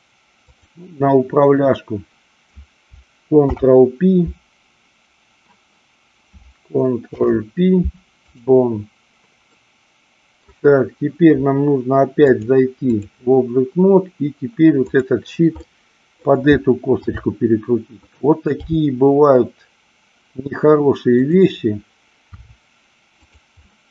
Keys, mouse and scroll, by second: 0.3-1.7 drag, 3.3 ctrl+p, 7.1 ctrl+p, 9.4-10.4 middle drag, 12.2-13.0 drag, 15.6-16.3 middle drag, 17.0 r, 18.1 click, 18.7 g, 21.2 click, 22.3 r, 23.2 click, 23.6-23.9 middle drag.